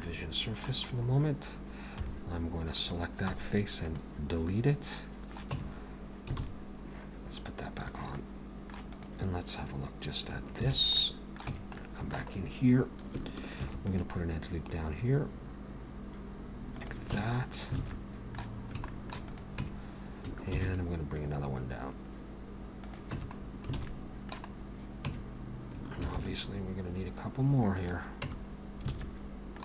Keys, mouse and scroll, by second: 0.0 middle click, 0.9-2.0 scroll up 2, 2.0 3, 2.8 click, 3.3 x, 4.5 middle click, 5.5 Tab, 6.4 alt+a, 6.6-7.7 scroll down 1, 7.7 click, 7.7-8.1 scroll down 1, 8.2 middle click, 8.9 click, 10.6 shift+h, 10.9 middle click, 11.5 Tab, 11.8 middle click, 12.4-12.8 scroll up 1, 13.6 ctrl+r, 17.2 Tab, 17.5 scroll down 2, 17.8 alt+a, 17.9 middle click, 18.9 shift+middle click, 19.3 click, 19.6 Tab, 20.5 ctrl+r, 23.2 Tab, 23.3-23.7 scroll down 4, 23.8 alt+a, 23.9 middle click, 24.5-25.0 scroll up 3, 25.1 Tab, 26.0 ctrl+r, 28.3 Tab, 28.6 scroll down 2, 28.9 alt+a, 29.0 middle click.